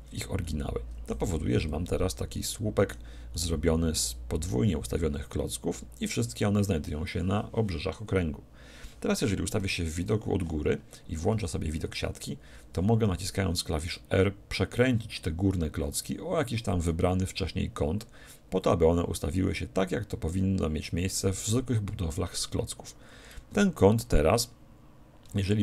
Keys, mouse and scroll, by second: 0.4-5.2 middle drag, 1.3 z, 9.6 KP_7, 11.3 z, 11.7-12.3 scroll up 1, 12.3-14.1 middle drag, 13.9 r.